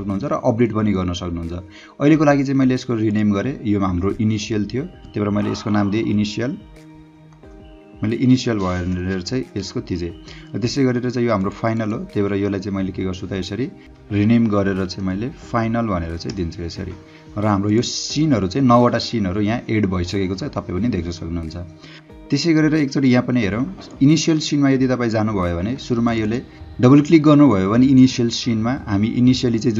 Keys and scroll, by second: 5.8-9.3 typing, 9.3 Return, 14.3-15.9 typing, 16.3 Return.